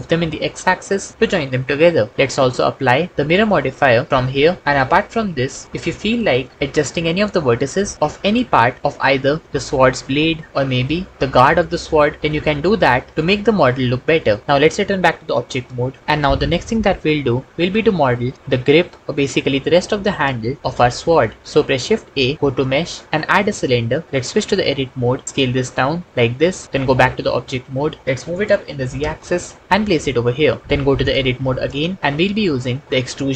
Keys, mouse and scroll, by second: 0.0 x, 2.6 Tab, 3.6-4.4 drag, 6.8 Tab, 8.1 alt+z, 10.5 g, 21.8 shift+a, 24.6 Tab, 25.2 s, 26.9 Tab, 28.8 g, 29.1 z, 31.7 Tab, 32.1 s.